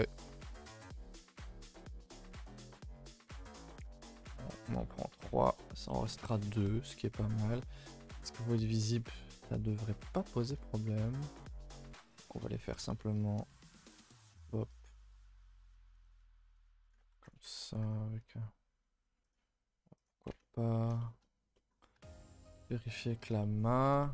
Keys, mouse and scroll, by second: 0.5-0.9 scroll up 2, 0.9-3.4 shift+middle drag, 3.4 a, 3.5 a, 3.6 middle click, 3.8 2, 4.2 click, 4.6 shift+click, 5.0 shift+click, 5.1-7.9 middle drag, 7.9 KP_0, 8.8 KP_0, 9.4-10.5 middle drag, 10.5 e, 12.3-13.3 middle drag, 13.3 s, 14.6-15.6 middle drag, 15.6 g, 16.5 s, 17.1 ctrl+r, 17.6 middle click, 18.1 g, 19.9 click, 20.3 Tab, 20.4-21.9 middle drag, 21.9 alt+h, 22.2 middle drag, 22.4 a, 22.6 a, 22.6-23.2 middle drag, 23.2 scroll up 2, 23.4-23.8 middle drag, 23.8 Tab, 24.0 middle drag.